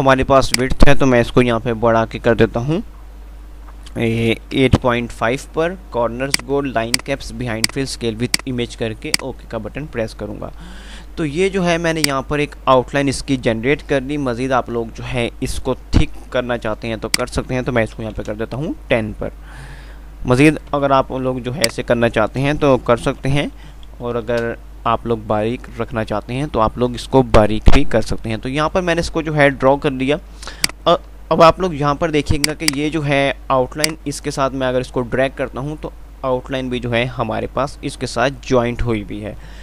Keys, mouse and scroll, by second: 30.0 F3, 30.8 click, 30.8 typing, 31.0 F2, 32.3-37.5 drag.